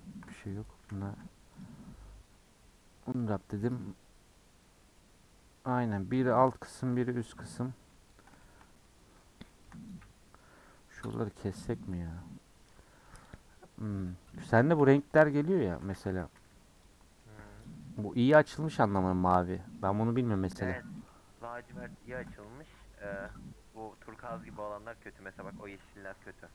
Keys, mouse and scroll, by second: 0.0 ctrl+click, 0.8 a, 2.6 u, 6.7-7.0 scroll down 4, 7.0-8.1 middle drag, 8.1-8.4 scroll up 3, 8.4-13.3 shift+middle drag, 13.3 click, 15.4 Tab, 15.7 Tab, 15.9 a, 16.2 3, 16.8 click.